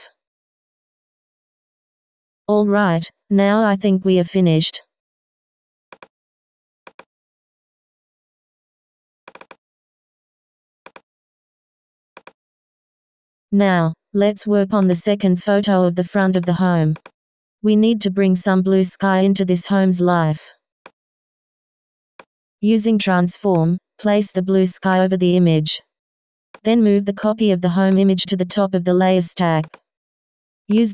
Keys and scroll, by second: 25.3 Return, 30.1 w.